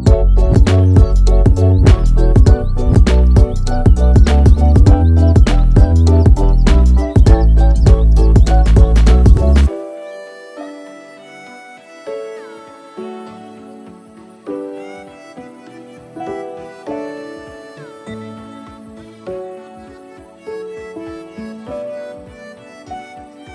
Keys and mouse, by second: 5.3-8.0 ctrl+drag, 10.3 click, 11.9-13.6 ctrl+drag, 14.1 ctrl+r, 17.3 ctrl+r, 22.6 shift+middle click.